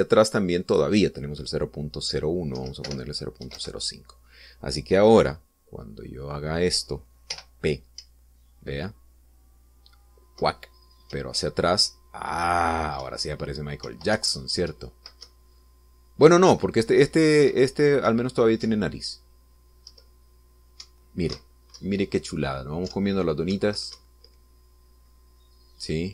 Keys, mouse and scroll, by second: 1.7 click, 3.5 Right, 3.8 BackSpace, 4.4 5, 4.5 Return, 8.3 p, 9.0 Up, 12.1 Down, 14.0 Left, 15.1 Up, 15.7 Right, 16.2 Left, 19.6 Up, 20.9 Left, 21.8 Right, 22.7 Left, 23.9 Up, 24.5 Right, 24.9 Left.